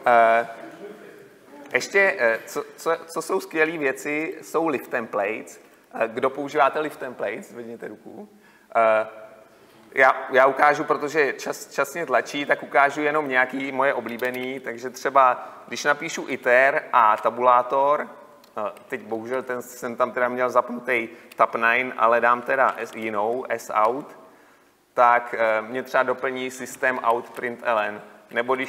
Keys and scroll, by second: 6.1 ctrl+F2, 17.8 Tab, 25.0 Tab, 27.4 Delete.